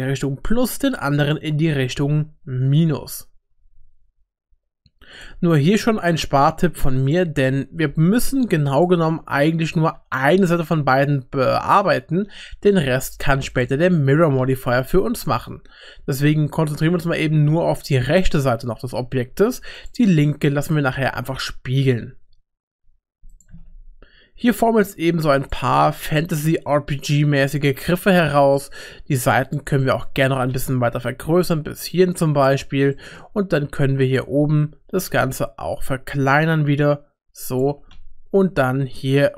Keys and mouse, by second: 1.7 r, 6.2 2, 7.0 alt+click, 9.9 r, 14.1 g, 18.9 3, 20.6 s, 23.5 s, 25.8 s, 27.9 shift+middle click, 28.6 middle click, 29.5 click, 29.8 middle click, 30.2 g, 32.9 middle click, 33.6 g, 33.7 3, 34.8 s, 37.7 g.